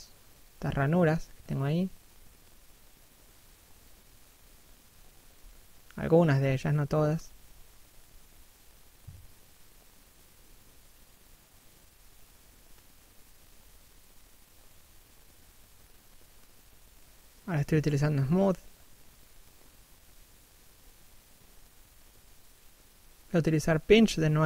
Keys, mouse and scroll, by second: 1.9 scroll down 1, 2.2 middle click, 4.4 scroll up 1, 4.6 middle click, 5.1 click, 12.4 click, 14.5 scroll down 1, 14.8 middle click, 15.9 click, 16.9 middle click, 18.6 middle click, 20.6-21.6 scroll up 1, 23.8 right click.